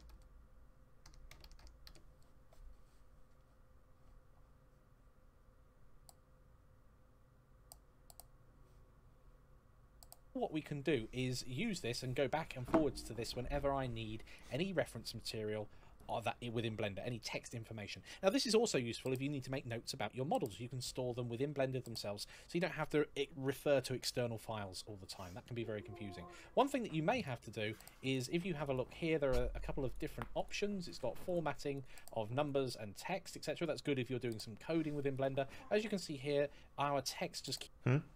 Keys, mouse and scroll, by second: 12.4-12.8 scroll down 1, 12.8-14.1 scroll up 1, 14.1 click, 16.8 click, 24.6-25.1 scroll down 1, 26.5-26.9 scroll up 1, 26.9 click, 29.1 click, 31.0 click, 33.3 click, 35.2 scroll down 1, 35.5-36.7 scroll up 1, 36.7 click.